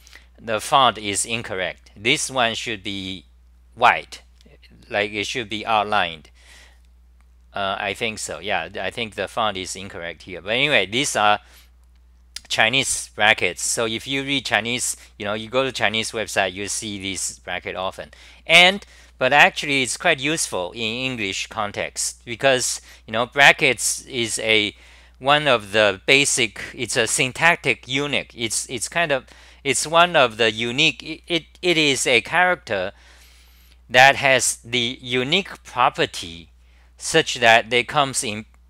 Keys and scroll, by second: 22.4 Return.